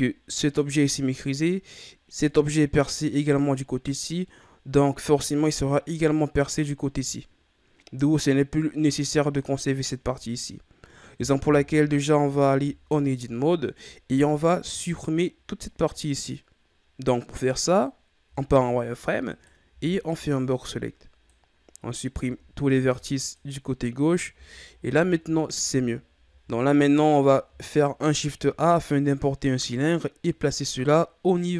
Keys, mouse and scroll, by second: 0.4 right click, 2.2-4.1 middle drag, 4.1 scroll down 2, 4.2-7.2 middle drag, 9.1 right click, 11.4 KP_1, 12.8 Tab, 14.3-14.8 ctrl+scroll down 2, 14.8-17.9 scroll up 2, 18.2 z, 19.2 right click, 19.6 b, 22.1 x, 24.3 z, 25.2 Tab, 25.8-28.0 ctrl+scroll up 9, 28.0 shift+a.